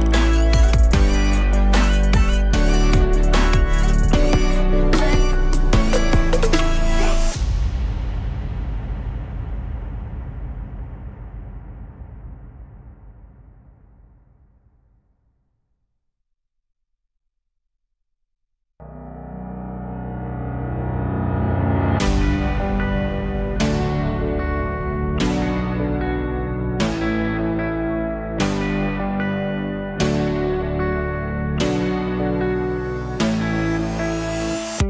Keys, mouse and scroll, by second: 7.1-9.0 scroll up 1, 9.0-9.6 scroll up 1, 9.6-10.1 alt+middle drag, 10.1-12.5 alt+drag, 15.0-16.0 drag, 16.8-18.9 drag, 18.9-19.4 middle drag, 19.4-20.1 drag, 20.1 Delete, 20.7 click, 20.8 shift+a, 26.2-28.1 drag, 28.1-28.5 scroll down 2, 28.5 middle click, 29.2 click, 29.3 shift+a, 32.7 click, 32.9 shift+a.